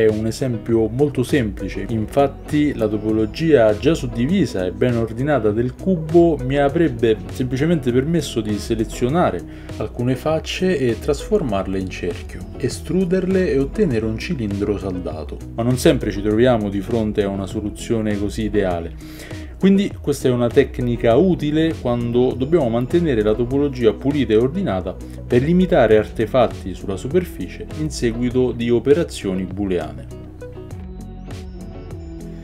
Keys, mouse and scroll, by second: 1.2 ctrl+z, 2.0 Tab, 2.2 ctrl+b, 3.2 Tab, 3.5 Tab, 4.2 Tab, 4.8 Tab, 6.2-6.7 shift+drag, 6.7 shift+middle drag, 7.0 shift+drag, 7.2-9.7 shift+middle drag, 9.7-32.4 right drag, 20.2 Tab, 20.6 Tab, 21.0 shift+z, 21.2 Tab, 21.7 shift+z, 21.9 Tab, 23.5 shift+z, 24.0 shift+click, 24.0 shift+middle click, 24.7 shift+z, 25.1 shift+z, 25.6 ctrl+z, 26.9 click, 27.1 shift+z, 27.7 click, 29.0 ctrl+b, 30.5 Tab.